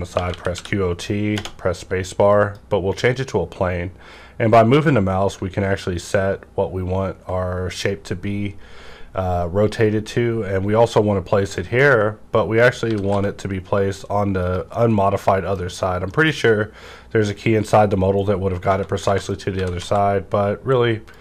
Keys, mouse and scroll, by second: 0.1-1.3 typing, 2.3 click, 5.4 ctrl+Num_Lock, 5.4 click, 5.6 ctrl+scroll down 1, 11.4 click, 11.4 ctrl+scroll down 1, 11.5 click, 11.8-14.4 middle drag, 12.8 typing, 14.3 click, 14.4 click, 14.7-16.4 middle drag, 16.4 scroll up 1, 18.0 scroll down 1, 18.6 Tab, 19.0-19.8 typing, 19.2 click, 19.8 click, 21.0 click.